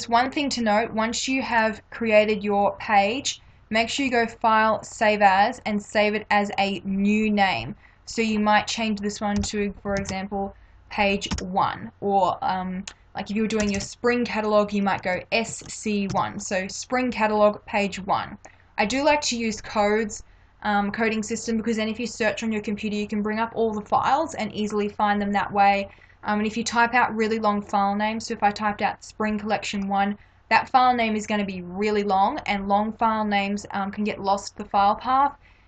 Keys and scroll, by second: 1.6 space, 9.4 -, 10.0 shift+p, 11.4 1, 13.7 BackSpace, 15.1 shift+s, 15.5 shift+c, 16.1 1.